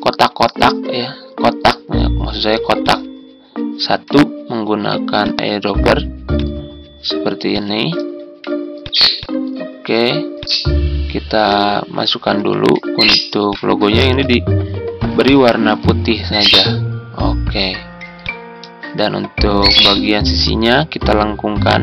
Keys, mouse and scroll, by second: 12.2 Home.